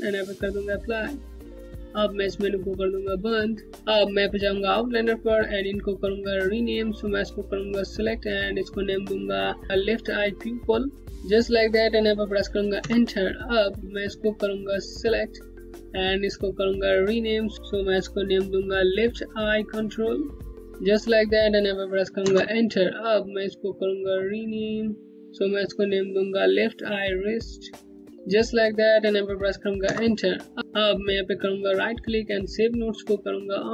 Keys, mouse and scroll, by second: 0.3 click, 3.6 scroll up 1, 4.4 scroll down 1, 6.0 click, 11.0 click, 12.4 click, 14.1 Return, 14.5 click, 20.3-21.1 typing, 21.8 Return, 23.5 click, 29.4 Return, 30.9 right click.